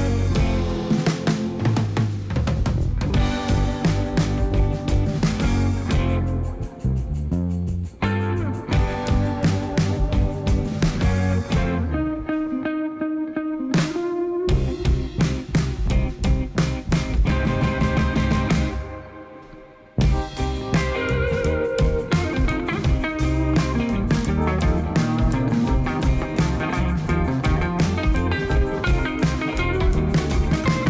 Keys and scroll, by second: 4.6 g, 5.0 x, 6.5 0, 11.4 Tab, 16.1 shift+s, 19.1 Tab.